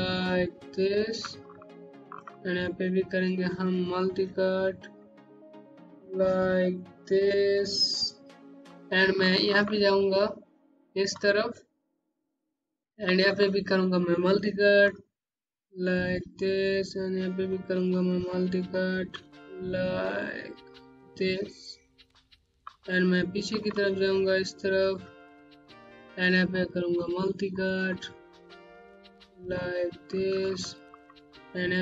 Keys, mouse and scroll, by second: 0.8 right click, 1.4 middle click, 3.8 click, 5.8 click, 6.9 right click, 8.4 scroll down 1, 9.1 middle click, 9.7-12.3 scroll up 1, 12.8 alt+Num_Lock, 15.1 click, 15.8 right click, 17.4 click, 20.9 right click, 22.2 scroll down 1, 22.6 click, 23.7-25.3 scroll up 1, 26.4 click, 29.6 right click, 30.4 middle click, 30.6 Home.